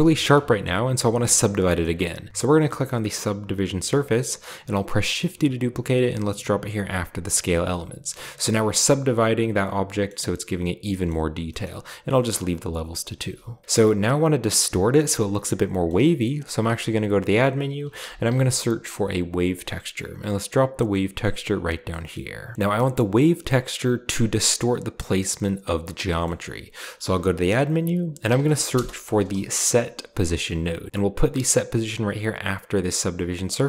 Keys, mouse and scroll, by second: 1.4-2.3 scroll down 1, 1.7-2.3 middle drag, 2.6 click, 5.1 shift+d, 6.7 drag, 7.3 click, 8.2-8.9 scroll down 1, 8.4-10.0 middle drag, 10.9-12.2 shift+middle drag, 11.7-12.2 scroll up 1, 12.5-13.7 scroll down 1, 13.7-14.6 scroll down 1, 13.8 middle click, 15.8-16.6 middle drag, 16.0-16.8 scroll down 1, 16.6 shift+a, 17.9-18.4 typing, 19.3 click, 21.6 click, 22.1-22.5 scroll up 1, 22.5-23.1 scroll down 1, 23.1 click, 26.0 middle click, 27.0 shift+a, 28.2-29.2 typing, 30.7 click, 32.2-33.6 drag.